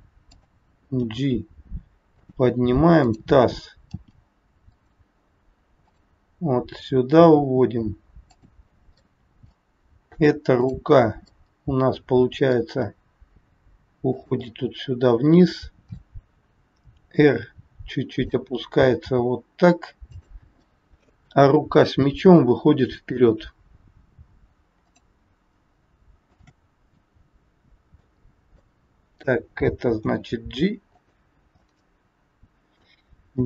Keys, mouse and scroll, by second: 1.0 g, 3.0 click, 4.0 g, 5.8 click, 6.5 g, 9.0 middle click, 10.5 click, 11.2 middle click, 12.7 g, 14.5 middle click, 17.0 r, 19.0 g, 20.6 middle click, 23.7 scroll up 2, 24.7 click, 26.2 shift+click, 26.9 middle click, 28.2 scroll down 2, 28.7 middle click, 29.8 g, 31.5 middle click, 33.3 g.